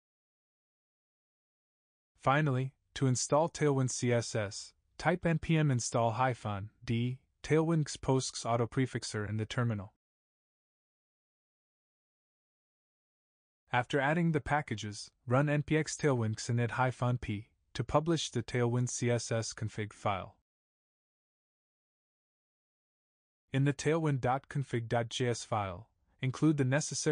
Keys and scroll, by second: 5.6 ctrl+v, 14.9 ctrl+c, 15.8 ctrl+v.